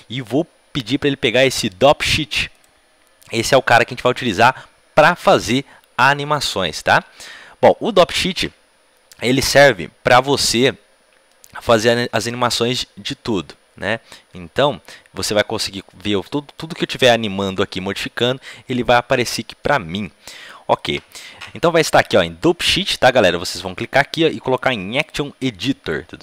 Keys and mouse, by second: 7.2-21.3 middle drag, 21.3-26.2 drag.